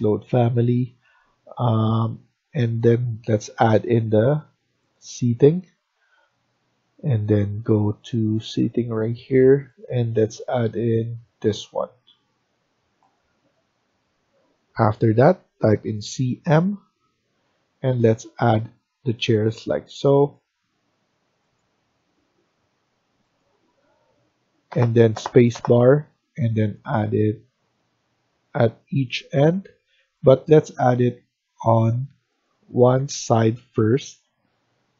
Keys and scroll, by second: 15.2-15.8 typing, 30.6 Escape, 30.8 Escape, 31.5 Escape, 32.8 Left, 33.1 Left, 33.3 Left, 33.4 Left, 33.6 Left, 33.8 Left, 34.0 Left, 34.3 Left.